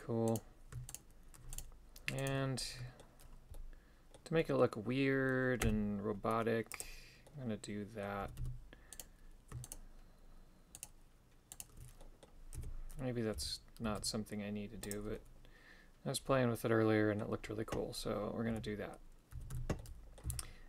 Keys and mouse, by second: 0.3 right click, 1.0 shift+right click, 1.6 shift+right click, 2.3 shift+right click, 2.6 middle click, 3.6 middle click, 4.5 middle click, 5.7 w, 7.3 middle click, 8.3 a, 8.4 a, 9.0 right click, 9.7 shift+right click, 10.8 shift+right click, 11.6 shift+right click, 12.0 middle click, 12.6 KP_3, 13.4 g, 15.2-17.3 middle drag, 18.6 KP_1, 19.4 a, 19.6 a, 19.8 middle click, 20.3 c.